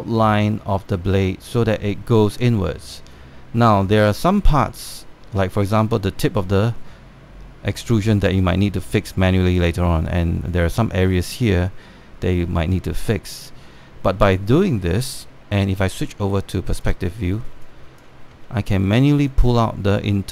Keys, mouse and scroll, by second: 16.7 space, 16.8 click, 18.0 scroll up 1, 18.3 alt+click, 18.9 scroll up 1, 19.2 alt+middle click, 20.0-20.3 drag.